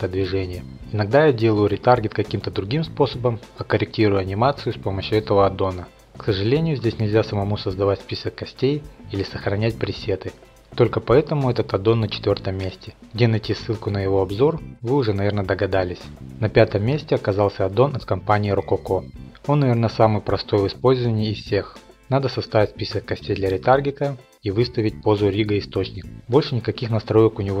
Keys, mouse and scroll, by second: 1.2 click, 2.5 click, 3.3 click, 5.4 click, 5.5 middle drag, 5.8 scroll, 10.9-11.9 drag, 11.9-13.2 middle drag, 13.2-14.7 drag, 20.9 click, 21.9 middle click, 22.8 click, 23.7 ctrl+Tab, 24.2 click, 24.8 alt+a, 25.0 alt+r, 25.0 alt+g, 25.6 1, 25.7 middle click, 25.8 shift+middle click, 25.9 click, 26.5 click, 26.5 r, 26.6 click, 27.2 click, 27.2 r, 27.3 middle click, 27.4 shift+middle click, 27.5 click.